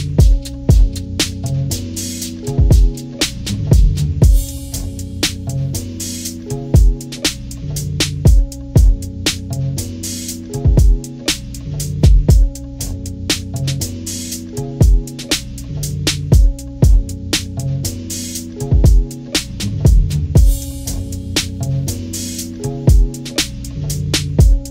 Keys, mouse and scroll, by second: 1.1 shift+click, 1.8 shift+click, 2.4 shift+click, 3.5 shift+click, 4.7 shift+click, 6.0 click, 7.7 click, 8.8 click, 9.4 click, 10.0 ctrl+-, 10.6 ctrl+-, 10.8 ctrl+-, 11.5 ctrl+-, 11.7 scroll down 2, 12.2 ctrl+=, 12.6 ctrl+=, 16.4 click, 17.1 Delete, 21.0 click, 21.3 Delete, 22.9 ctrl+z, 24.1 click.